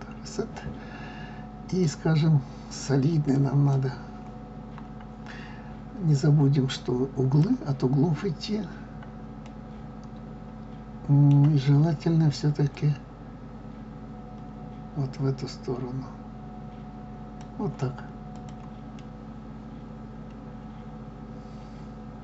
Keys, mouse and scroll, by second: 4.8 scroll up 1, 6.6-8.0 drag, 8.0 scroll up 2, 8.7 scroll down 2, 9.5-13.1 middle drag, 13.1-18.4 drag, 19.0-21.9 middle drag.